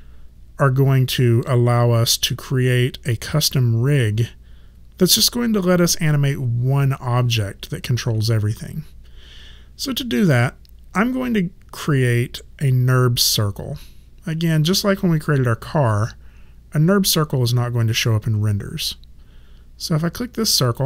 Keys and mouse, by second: 15.9 click, 20.7 click.